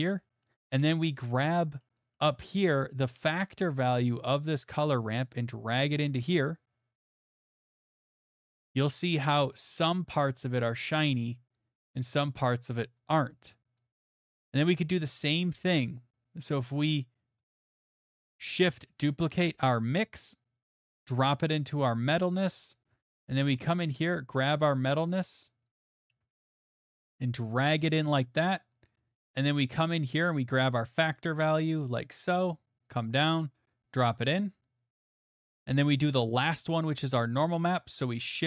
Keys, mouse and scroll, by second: 0.0 middle click, 0.4 middle click, 1.4 middle click, 1.8 middle click, 2.1 middle click, 5.9 click, 8.4 click, 8.6 middle click, 8.6 middle click, 9.7 middle click, 12.7 middle click, 14.0 click, 14.3 middle click, 14.3 middle click, 14.4 middle click, 14.9 middle click, 15.7 middle click, 17.4 click, 18.4 click, 18.8 middle click, 19.5 d, 21.1 click, 22.4 middle click, 22.9 middle click, 22.9 middle click, 22.9 middle click, 23.2 middle click, 26.6 scroll, 27.8 right click, 28.9-30.3 scroll, 30.3 scroll, 33.5 click, 35.6 click, 36.4 click, 37.1 middle click, 38.1 click.